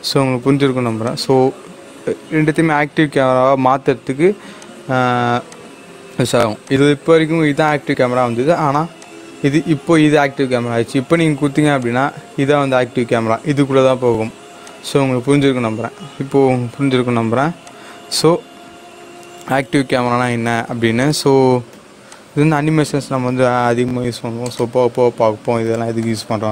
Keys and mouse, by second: 1.0 click, 4.5 click, 8.9 click, 11.7 click, 11.8 click, 14.6 click, 17.6 click, 17.6 click, 20.9 click, 21.0-26.5 drag.